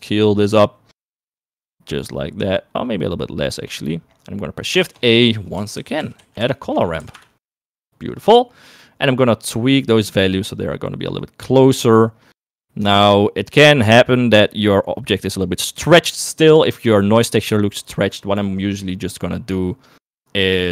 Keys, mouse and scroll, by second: 0.0-4.1 drag, 4.5 middle click, 5.0 shift+a, 8.5 middle click, 9.4-10.6 drag, 11.4 click, 13.0 middle click, 13.4 middle click, 18.3 click, 18.9 middle click, 20.1 middle click.